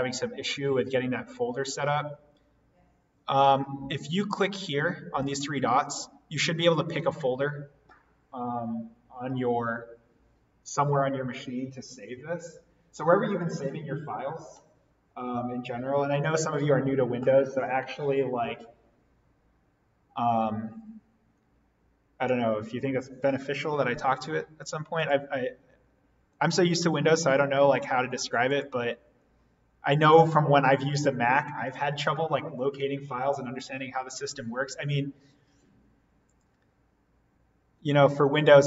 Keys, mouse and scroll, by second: 5.1 click, 24.9 click, 26.3 right click, 28.5 click, 36.2 click.